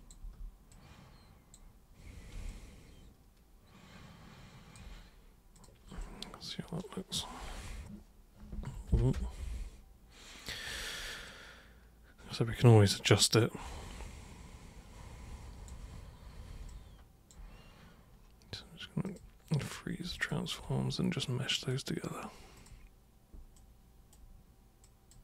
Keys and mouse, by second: 0.2 super+c, 0.7 super+click, 2.5-4.7 alt+super+drag, 5.5 super+click, 6.0-10.4 alt+super+drag, 11.2-15.7 alt+super+drag, 16.7-17.3 alt+super+drag, 19.1 super+click, 20.2 ctrl+shift+super+click, 21.6 super+click, 22.6 super+click, 23.5 super+right click, 24.8 super+click.